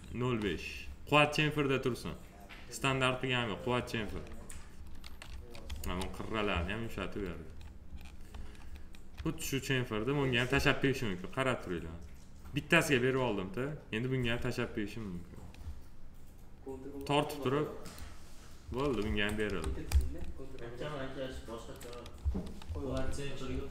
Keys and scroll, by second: 5.7 F4, 19.0 F4, 22.1 F4.